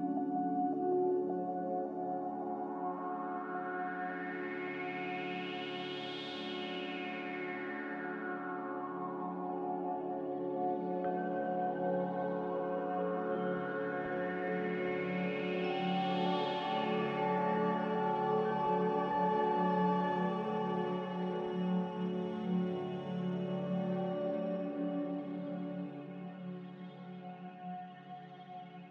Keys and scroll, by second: 11.8 z, 18.7 5, 18.9-21.5 Return, 21.5 s, 22.2 a.